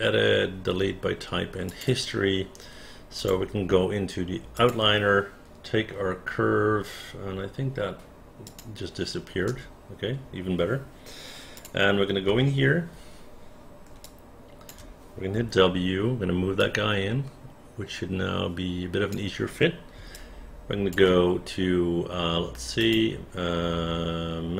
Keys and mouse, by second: 1.7 click, 3.2 click, 4.6 click, 8.5 click, 9.5 space, 11.6 click, 12.3 space, 14.1 alt+click, 15.4 w, 16.6-19.1 drag, 20.2 alt+click.